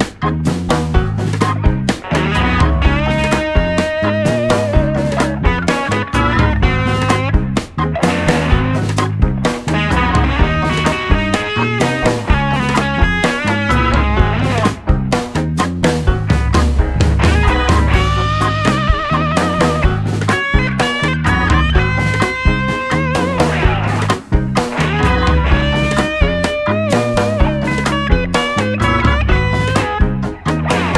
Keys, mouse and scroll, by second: 2.4-6.6 drag, 6.6 alt+g, 7.7 s, 10.8 click, 14.0 w, 16.2-17.5 middle drag, 17.5-19.3 right drag, 19.5 x, 22.8-24.7 right drag, 24.0 KP_1, 24.7-27.3 middle drag, 27.5 shift+d, 28.3 g.